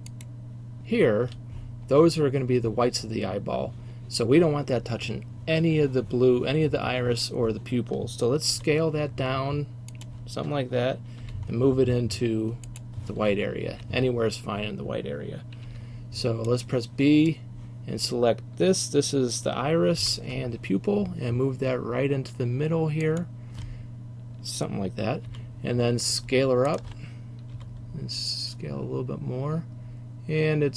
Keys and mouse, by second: 8.6 s, 11.3-12.1 drag, 11.3 g, 13.8-20.1 drag, 13.8 a, 20.1 g, 25.4 s, 27.6-30.7 drag, 27.6 s.